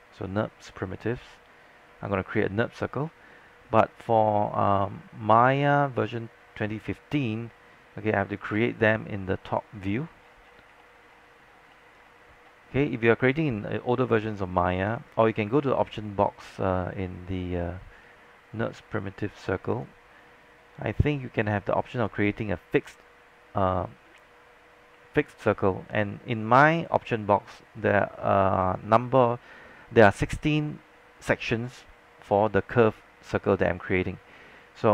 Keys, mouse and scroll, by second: 10.1 scroll down 1, 10.8 alt+middle click, 11.0 alt+middle click, 11.3 scroll up 1, 11.9 alt+scroll up 1, 12.1 scroll down 1, 15.2-34.9 drag.